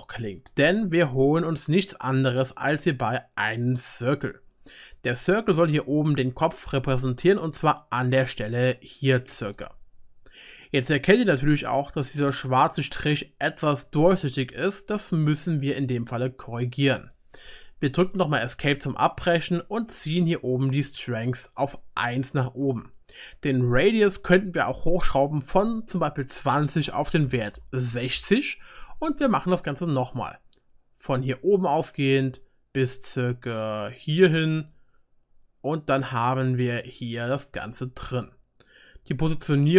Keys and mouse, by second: 8.0-11.3 drag, 8.0-11.3 middle drag, 8.0-11.3 right drag, 17.3-31.4 drag, 17.3-39.7 middle drag, 17.3-31.4 right drag.